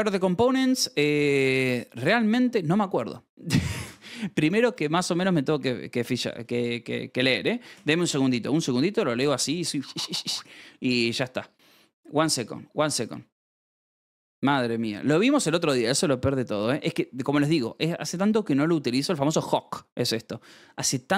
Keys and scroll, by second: 4.6 h, 5.0 space, 5.8 Return, 8.4-12.7 scroll, 13.1 space, 13.9 Down, 14.1 Return, 17.5-19.3 scroll.